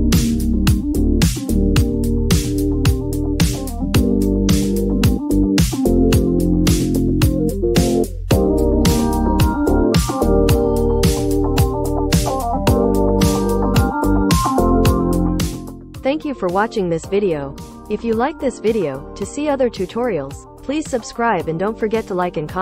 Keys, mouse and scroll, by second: 11.9-15.2 drag.